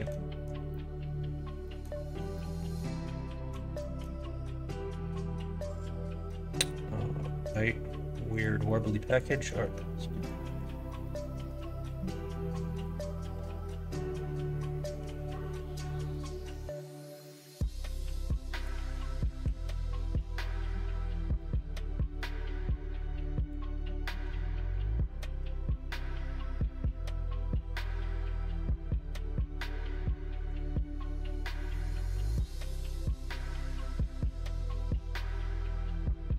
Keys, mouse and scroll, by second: 0.6-1.8 middle drag, 2.3-3.4 middle drag, 3.8 middle click, 6.2-7.4 middle drag, 8.3 click, 8.6 middle click, 9.1 click, 9.3 middle click, 9.5 Tab, 10.0 middle click, 10.8 middle click, 11.3 middle click, 12.7 click, 13.2 3, 13.5 click, 15.5 ., 17.1-18.6 drag, 19.4 o, 20.1 click, 20.5 middle click, 21.3 middle click, 22.2-23.4 drag, 23.6 middle click, 24.1 ctrl+r, 25.3 ctrl+b, 30.9 middle click, 32.4 click, 32.6 middle click, 33.6 middle click, 34.6 click, 34.9 middle click.